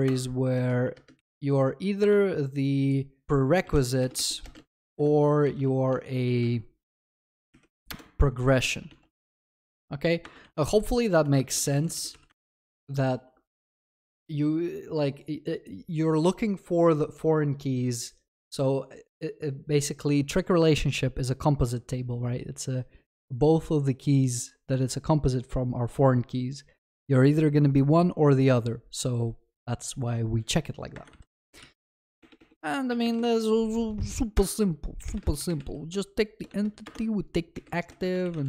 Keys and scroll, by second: 7.9 Return, 12.2 ctrl+s, 34.4 Return.